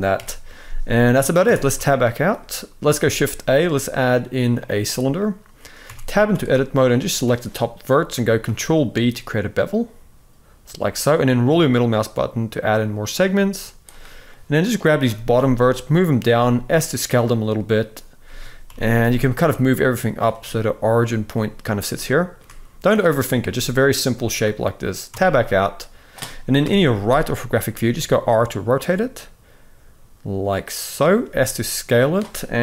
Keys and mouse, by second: 1.2 Tab, 1.8 shift+middle click, 2.8 shift+a, 5.6 Tab, 5.9 z, 6.6 click, 8.2 ctrl+b, 14.1 click, 14.8 g, 16.1 s, 18.0 a, 18.4 g, 21.7-22.1 shift+middle drag, 22.9 click, 23.2 s, 24.9 Tab, 26.4 KP_3, 27.5 r, 30.9 s, 32.3 KP_1.